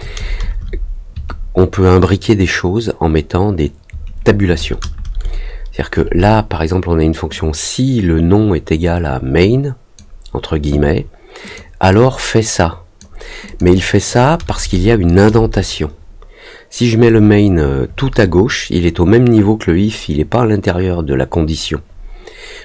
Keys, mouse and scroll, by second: 7.3-9.9 drag, 11.4 click, 11.8-12.9 drag, 13.4 click.